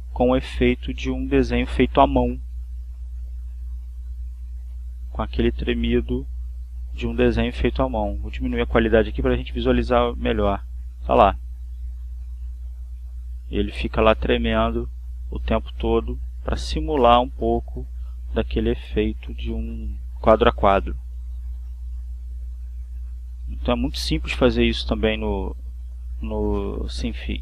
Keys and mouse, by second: 0.1 click, 7.1-8.2 drag, 8.5 click, 9.3 click, 10.9 click, 15.6 click, 16.9 click, 23.6 click, 24.9 click, 26.0 click.